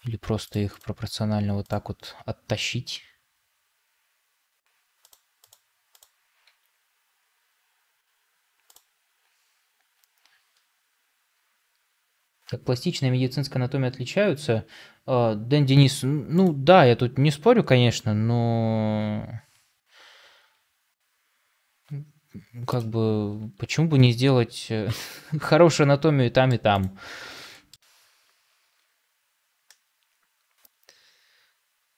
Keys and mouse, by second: 2.8 g, 6.3 g, 20.4 g, 23.8 Tab, 25.0-26.5 middle drag, 27.4 shift+middle drag, 29.6-31.9 middle drag.